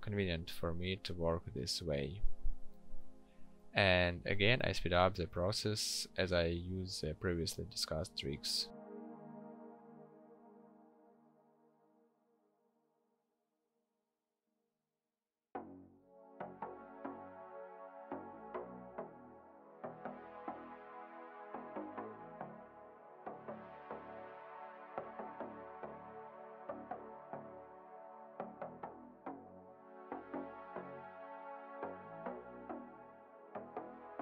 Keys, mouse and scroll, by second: 12.1 ctrl+shift+n, 12.8 p, 23.7 right click, 29.4 ctrl+shift+n.